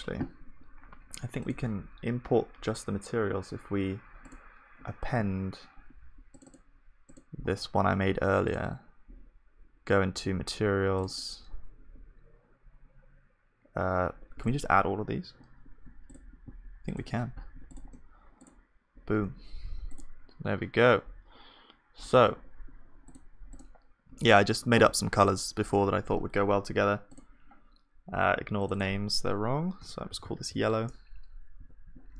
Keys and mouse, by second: 24.8-31.6 drag.